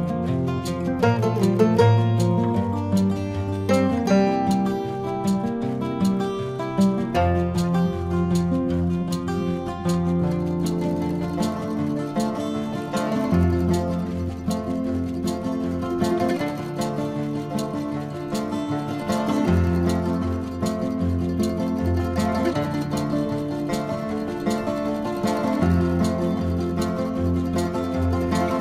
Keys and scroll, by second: 12.0 space, 16.3 ctrl+alt+z, 18.1 ctrl+alt+z, 22.6 ctrl+alt+z, 26.3 ctrl+-.